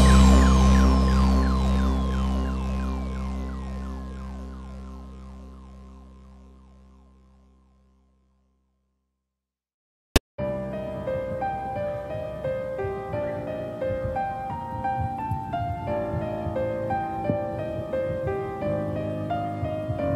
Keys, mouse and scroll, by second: 15.7-16.3 scroll up 2, 16.3 click, 17.3 e, 19.8 4.